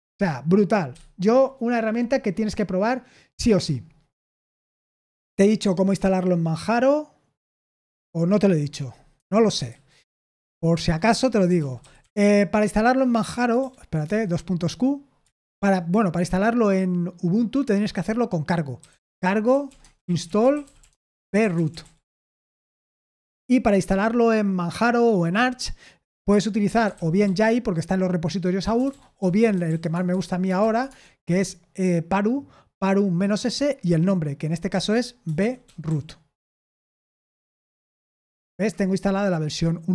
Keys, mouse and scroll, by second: 0.9 q, 5.7-7.5 scroll down 1, 8.0-8.5 scroll down 1, 8.5-9.1 scroll down 1, 9.1 Escape, 9.6 q, 10.7-12.5 typing, 13.5 BackSpace, 14.0 Return, 15.3 ctrl+l, 18.5-23.5 typing, 26.5-30.8 typing, 34.6-37.1 typing.